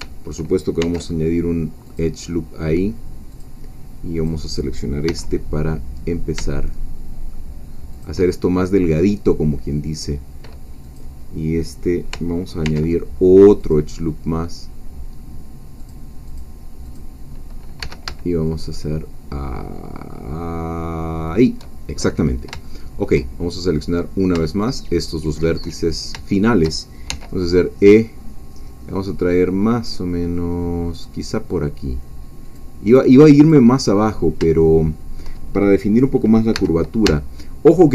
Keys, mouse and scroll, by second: 0.8 ctrl+r, 1.8 click, 3.3 click, 4.3 click, 5.0 g, 7.9 shift+click, 10.8 click, 12.6 ctrl+r, 13.6 click, 15.8 click, 16.4 click, 17.8 g, 21.3 shift+click, 22.7 shift+middle click, 24.0 click, 24.6 shift+click, 25.0 shift+middle click, 25.8-26.1 shift+scroll down 2, 26.2 shift+middle click, 27.1 shift+e, 32.4-33.7 drag, 34.0-34.5 scroll up 2, 34.5-35.7 shift+middle drag, 36.6 scroll down 2, 36.6 g.